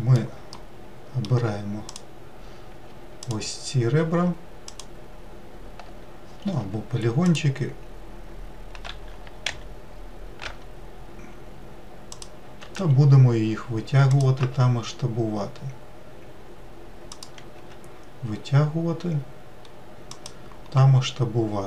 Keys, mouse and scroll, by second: 2.1 click, 3.5 alt+click, 4.9 alt+click, 6.8 3, 7.5 click, 9.1 g, 13.0 e, 14.6 s, 17.8 e.